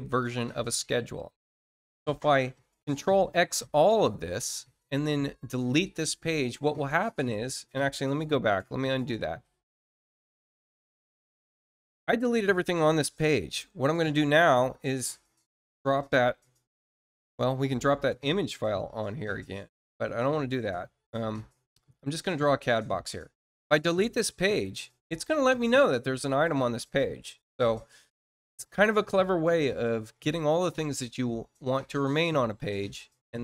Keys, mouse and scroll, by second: 0.1 ctrl+click, 5.5 click, 14.3 click, 21.9 click, 24.5 click.